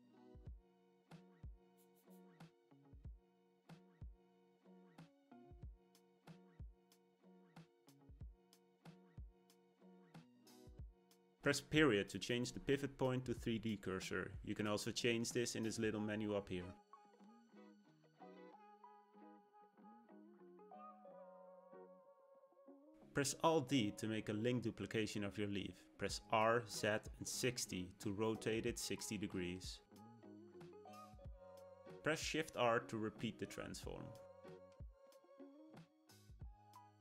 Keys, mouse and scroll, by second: 1.5 KP_7, 2.4 g, 5.8 middle click, 6.6-7.2 scroll down 2, 6.8 shift+middle click, 7.2-9.6 middle drag, 9.6-10.0 scroll up 2, 10.0-12.3 shift+middle drag, 12.3 ., 16.9-19.1 drag, 19.1 middle click, 20.0-22.9 scroll down 1, 22.9 alt+d, 32.3 shift+r, 33.5-36.6 middle drag.